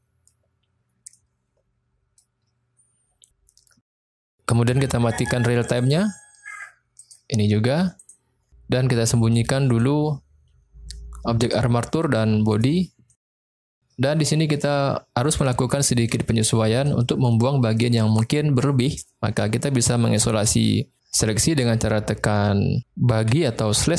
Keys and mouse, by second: 1.1-2.2 middle drag, 5.7 click, 7.0 click, 7.9 click, 9.6 click, 11.3 click, 12.4 click, 12.9-13.5 middle drag, 14.0-14.5 middle drag, 14.8-15.4 middle drag, 15.8-16.1 shift+middle drag, 16.7 click, 17.2-17.7 middle drag, 23.3 KP_Divide.